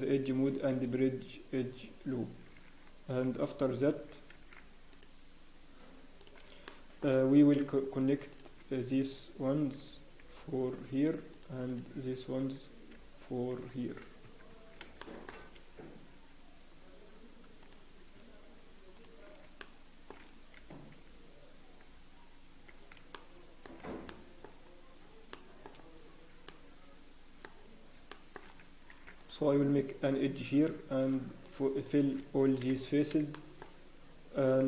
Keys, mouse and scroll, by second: 4.3 ctrl+r, 6.6 shift+middle click, 8.0 click, 8.3 shift+click, 9.8 f, 11.7 shift+click, 12.9 f, 13.9 scroll down 1, 13.9 f, 14.2 Tab, 15.0 shift+middle click, 15.0 scroll down 4, 15.3 scroll up 1, 16.2 scroll down 1, 16.8 scroll up 6, 18.9 shift+click, 19.6 shift+middle click, 20.5 f, 26.0 scroll down 1, 26.4 shift+middle click, 27.5 scroll up 1, 27.9 scroll down 3, 28.1 shift+middle click, 28.9 ctrl+r, 28.9 scroll up 2, 30.5 click, 31.0 shift+click, 31.9 click, 32.6 f, 33.3 shift+middle click, 33.8 scroll up 1.